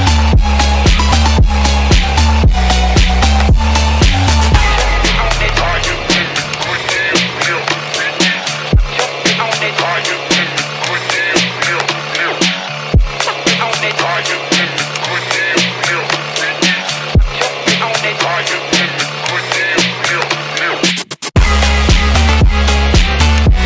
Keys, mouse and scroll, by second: 1.6-4.6 drag, 5.5-7.3 drag, 8.6-9.2 middle drag, 10.4-11.7 drag, 12.4-14.4 drag, 16.2-18.9 drag, 19.5-20.7 drag, 21.3-23.6 drag.